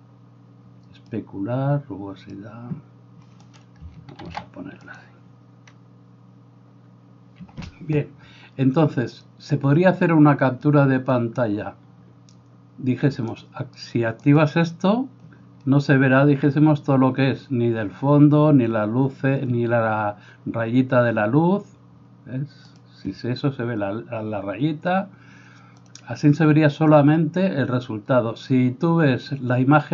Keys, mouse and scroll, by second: 3.6 right click, 4.3 ctrl+2, 13.3 click, 14.3 click, 22.8 click, 25.9 click.